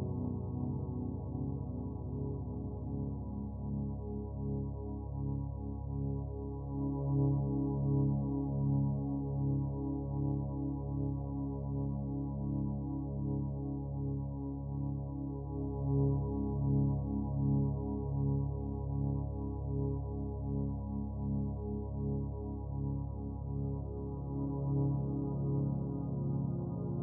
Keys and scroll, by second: 14.0 ctrl+alt+z.